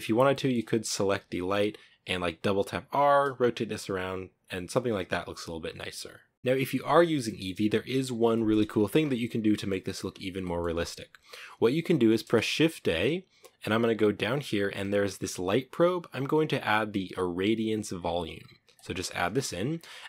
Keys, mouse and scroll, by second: 0.0 scroll down 5, 0.2-0.8 shift+middle drag, 0.8-1.1 scroll down 1, 1.1 r, 6.3-7.2 scroll down 2, 7.2-8.9 middle drag, 8.9-9.4 scroll down 2, 9.4-10.5 middle drag, 10.5 scroll up 2, 19.3 scroll down 1, 19.4-20.0 middle drag.